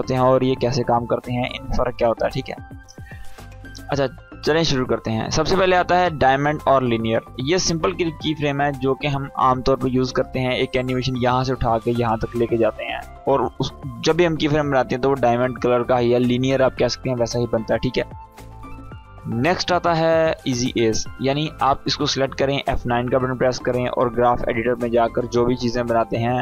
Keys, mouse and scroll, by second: 2.9-4.1 drag, 7.0-8.2 drag, 20.2 click, 21.4-22.3 drag.